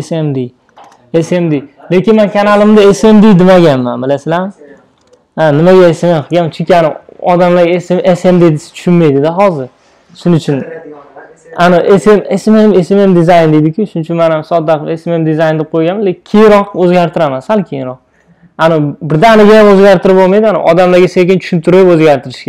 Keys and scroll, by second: 16.3 super+a.